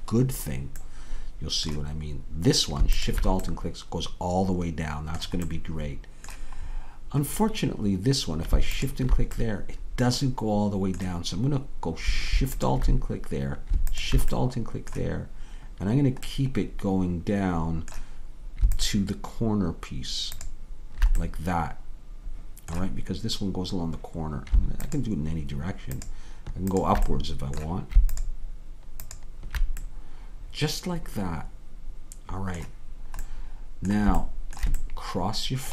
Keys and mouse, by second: 3.0-8.1 drag, 8.1-13.7 middle drag, 13.7-18.0 drag, 18.0 middle click, 19.0-24.3 drag, 28.5-31.8 drag, 33.0-35.7 middle drag.